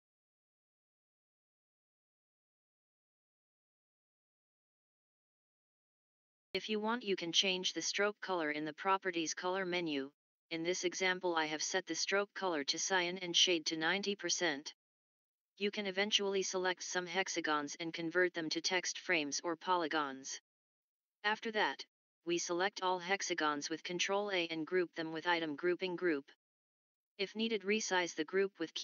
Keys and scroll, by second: 15.7-16.1 typing, 16.9 Return, 20.9 ctrl+a.